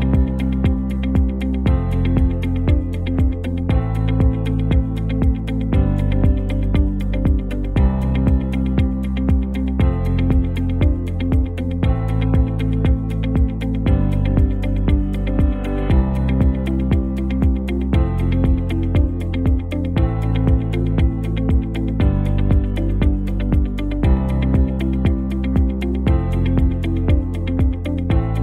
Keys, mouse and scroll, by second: 0.5 click, 1.6-6.7 typing, 7.5 click, 8.3 ctrl+t, 8.9-10.2 drag, 13.4 v, 14.4 click, 14.9 alt+scroll down 1, 16.2 alt+scroll up 1, 18.2-18.5 alt+scroll down 2, 18.5-19.3 alt+scroll up 2, 19.3 t, 20.2 click, 20.4 ctrl+a, 21.1 click, 21.5-23.7 typing, 24.3 click.